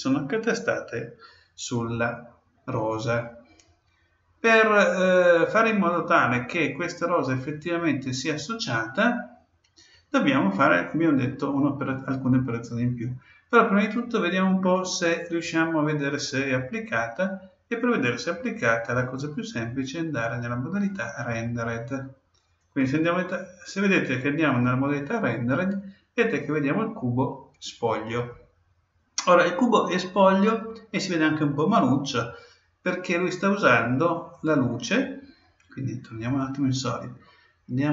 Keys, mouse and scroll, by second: 4.0-6.6 middle drag, 13.6-15.5 middle drag, 18.6-20.4 drag, 34.3-36.0 drag, 37.0-37.9 middle drag.